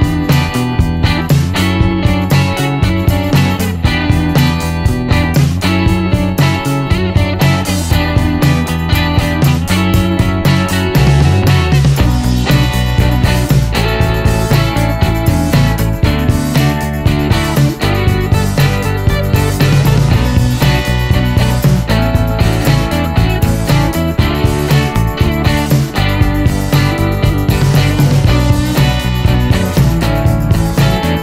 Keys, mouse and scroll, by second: 1.6 click, 2.4 click, 3.3 click, 3.8-4.1 scroll down 1, 4.1 middle click, 4.6 middle click, 5.2 middle click, 5.7 middle click, 6.1-6.7 scroll up 1, 8.4 click, 9.1 click, 9.9 click, 10.3-10.6 scroll down 1, 10.6 middle click, 11.3 middle click, 11.8-12.2 scroll up 1, 14.1 click, 15.2 click, 16.1 click, 16.4 scroll down 1, 16.7-18.0 middle drag, 18.1-18.5 scroll up 1, 19.6 click, 20.6 click, 21.5 click, 21.8-22.1 scroll down 1, 22.1 middle click, 22.7 middle click, 23.4 middle click, 23.8-24.2 scroll up 1, 25.9 click, 26.8 click, 27.8 click, 28.5 right click, 29.3 middle click, 29.9-30.2 scroll down 1, 30.2 middle click, 30.8 middle click.